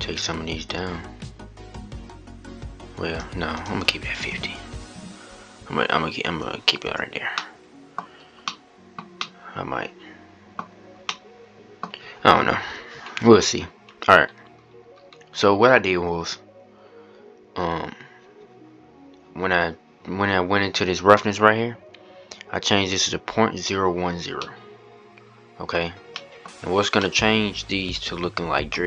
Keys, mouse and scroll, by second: 3.2-7.1 drag, 7.1-7.9 middle drag, 7.9 scroll up 1, 8.1-12.5 middle drag, 12.5-16.6 scroll down 42, 16.6-19.1 scroll up 1, 19.1-19.7 scroll up 2, 24.1 scroll up 1, 24.1-25.5 middle drag, 25.5 scroll up 2, 25.8-26.7 scroll down 3, 25.9-26.3 middle drag, 26.7-28.5 middle drag, 28.5 scroll up 2.